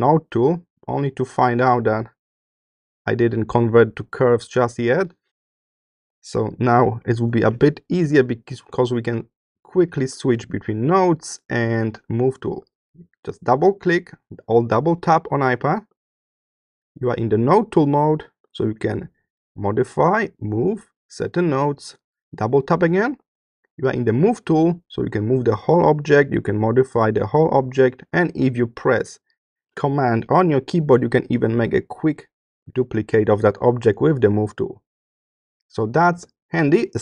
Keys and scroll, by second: 8.0 BackSpace.